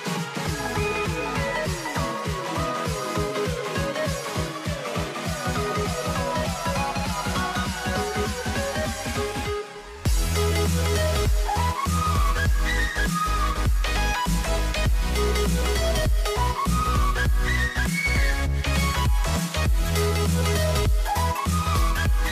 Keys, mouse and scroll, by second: 1.1 Tab, 3.1 g, 7.1 click, 9.0 a, 12.7 click, 14.6-16.5 middle drag, 16.5 ctrl+r.